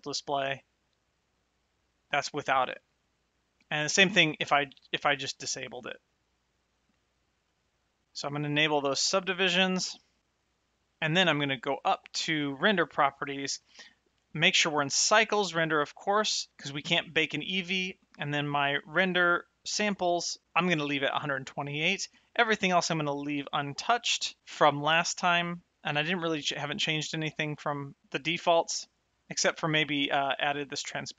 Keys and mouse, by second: 4.2 click, 6.6 click, 8.0 click, 12.2 click.